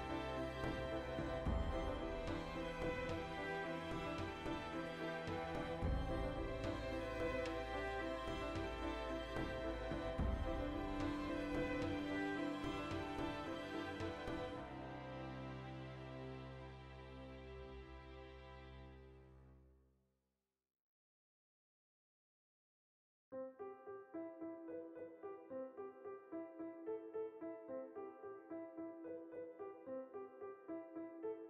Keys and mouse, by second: 0.0 click, 0.8 Tab, 1.1-3.0 shift+middle drag, 2.8 Tab, 3.0-3.3 right drag, 3.3 h, 3.5 right drag, 3.7 Tab, 3.8-5.0 middle drag, 5.2 a, 5.4 g, 5.7 right click, 5.9 middle click, 8.9-12.4 ctrl+middle drag, 10.9 ctrl+r, 12.4 right click, 12.9 ctrl+r, 15.0 right click, 15.2-17.7 middle drag, 16.3 ctrl+r, 17.7 right click, 18.3 ctrl+r, 19.4 right click, 19.7-21.0 middle drag, 20.5 ctrl+r, 21.0 right click, 21.2 ctrl+r, 21.6 alt+shift+right click, 22.0 g, 22.7 shift+click, 23.0 o, 23.4 Tab, 24.2 ctrl+2, 25.0 click, 25.2 Tab, 25.4-26.9 ctrl+shift+middle drag, 26.1 ctrl+r, 26.9 click, 27.1 ctrl+r, 27.7 click, 27.9-31.0 middle drag, 30.3 ctrl+r, 31.0 click, 31.2 ctrl+r.